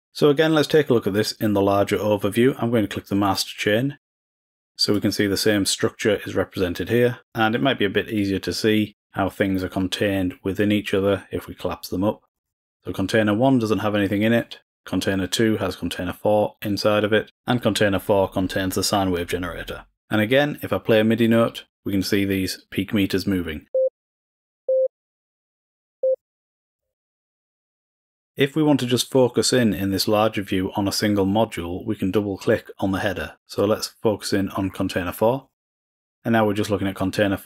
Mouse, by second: 3.2 click, 4.1-5.3 drag, 7.3 click, 9.0 click, 10.8 drag, 11.1 drag, 11.7 click, 12.3 click, 12.9 click, 14.9 click, 21.2 click, 23.7 click, 24.6 click, 26.0 click, 27.2-34.8 drag.